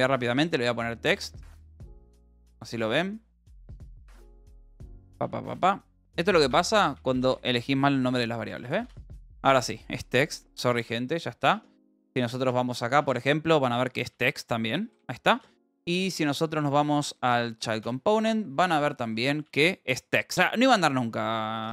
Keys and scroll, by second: 2.6 Escape, 4.2 a, 5.6-9.1 typing, 6.4 Escape, 9.4 ctrl+s, 10.7-13.5 typing, 12.4 Return, 14.8 j, 15.3 space, 16.4 j, 17.6-19.7 typing, 17.8 Return.